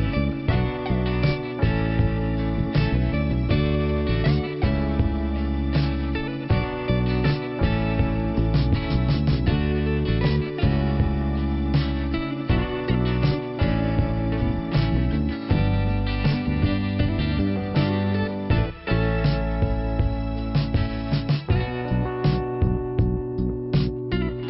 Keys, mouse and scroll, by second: 0.0 click, 1.4 scroll up 1, 5.9 click, 9.5 click, 9.7 click, 10.0 right click, 10.1 double right click, 11.4 click, 12.3-13.0 scroll down 1, 13.0 p, 15.2 scroll up 2, 17.7 click, 20.0-20.4 scroll down 1, 21.5 middle click, 23.1 click, 24.2 click.